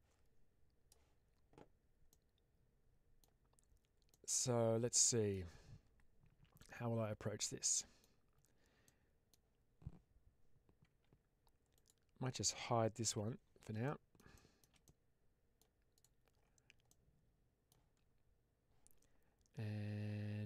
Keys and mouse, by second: 2.0-3.1 middle drag, 4.0-5.2 middle drag, 6.5-7.9 middle drag, 8.7 middle click, 10.8 Tab, 13.0 h, 13.7 middle click, 14.2 middle drag, 14.7-15.5 middle drag, 15.8 click, 16.8 middle click, 20.0 Tab.